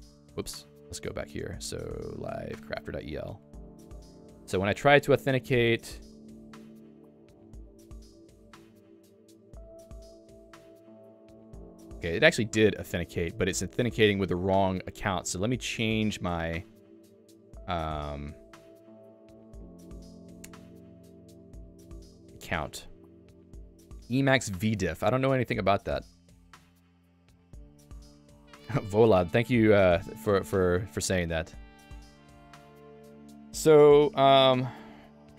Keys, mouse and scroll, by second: 1.6 ctrl+alt+u, 2.9 Return, 6.2 Return, 10.5 click.